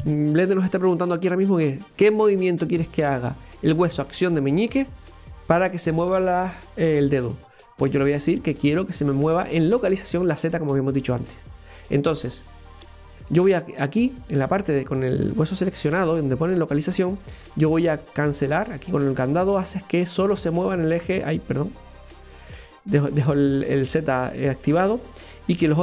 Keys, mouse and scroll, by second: 12.5 right click, 18.1 click, 19.0 click, 21.8 click, 22.3 click.